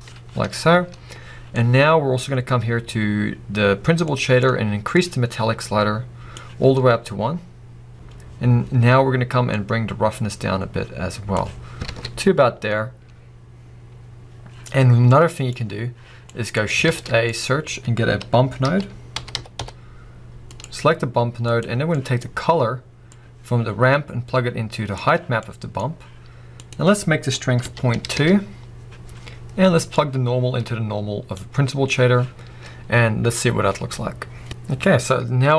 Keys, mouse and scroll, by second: 0.4 scroll up 1, 5.1 click, 7.5-7.9 scroll down 1, 8.1-8.6 scroll up 1, 9.7 click, 11.6 scroll down 1, 12.0 alt+a, 23.1 click, 32.7 scroll up 1.